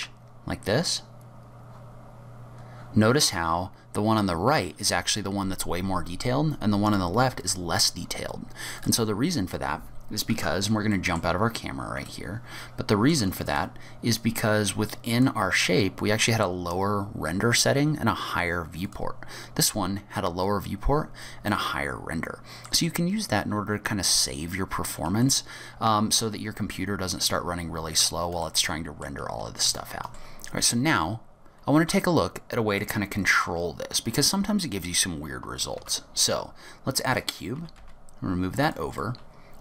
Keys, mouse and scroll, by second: 10.3 KP_0, 10.9 scroll down 1, 10.9 middle click, 11.3-12.1 scroll up 9, 12.1 shift+middle click, 13.5 click, 15.2 click, 18.9 click, 21.5 middle click, 25.3 shift+middle click, 27.4-28.3 scroll up 13, 28.5 shift+middle click, 29.7 click, 30.1 Tab, 30.1 Delete, 30.1 middle click, 31.9-32.7 scroll down 4, 32.9 middle click, 35.9 shift+a, 37.6 g, 39.1 middle click.